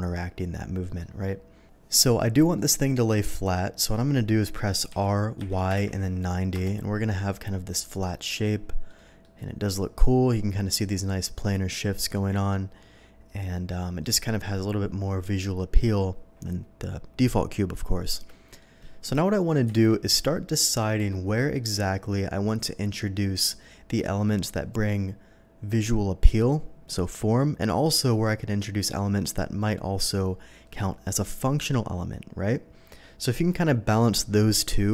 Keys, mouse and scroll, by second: 0.8 middle drag, 1.2-1.6 middle drag, 1.9 middle drag, 2.5 middle drag, 3.2-3.9 middle drag, 4.9 r, 5.4 y, 5.7 9, 5.8 0, 6.5 Return, 7.4-7.9 middle drag, 8.1-8.9 middle drag, 8.9 middle drag, 9.3-10.7 middle drag, 11.9 middle drag, 12.5-13.8 middle drag, 15.2-15.7 middle drag, 18.1-18.6 middle drag, 19.8 KP_3, 21.1-21.5 shift+middle drag.